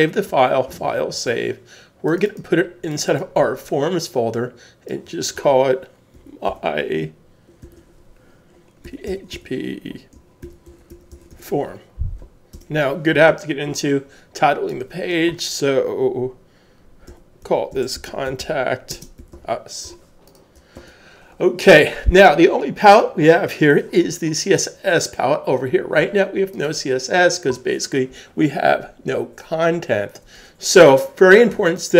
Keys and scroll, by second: 0.7 super+s, 6.5-7.6 typing, 8.8-10.9 typing, 12.5 Return, 17.2-19.4 typing, 20.7 super+s.